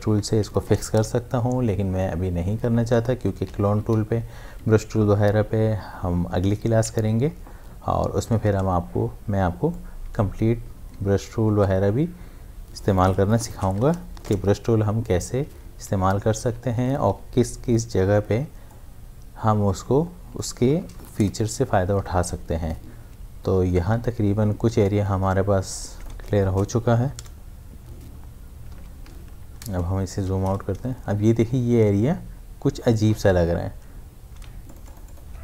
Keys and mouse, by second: 0.3 shift+F5, 1.0 Return, 3.4 Return, 3.6 ctrl+d, 3.9 v, 7.3-8.1 typing, 9.7 click, 10.9 space, 13.5 shift+F5, 14.3 Return, 16.4 ctrl+d, 16.8-18.2 typing, 18.7-20.8 drag, 20.8 shift+F5, 21.2 Return, 23.7 Return, 24.0 ctrl+d, 24.8-26.5 drag, 26.5 shift+F5, 27.2 Return, 28.8 ctrl+d, 30.2 v, 34.4 ctrl+space, 34.7 ctrl+click, 34.9 ctrl+space, 35.0 ctrl+click.